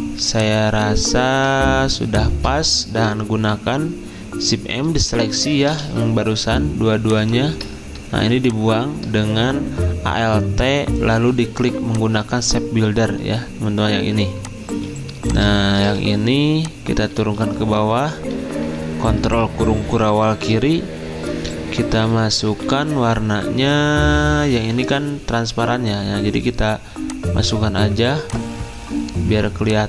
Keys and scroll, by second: 2.5-3.2 typing, 15.8 v, 17.1 ctrl+z, 18.3 ctrl+[, 18.6 ctrl+[, 22.1 F6.